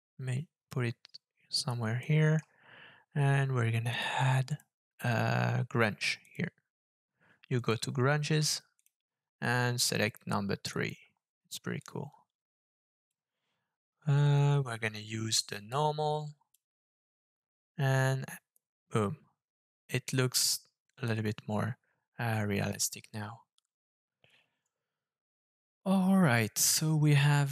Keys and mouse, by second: 2.0 middle click, 3.9-4.3 drag, 4.6-6.5 drag, 7.6-8.5 drag, 8.8-10.9 drag, 11.8-13.1 drag, 15.7-16.5 drag, 16.6 middle click.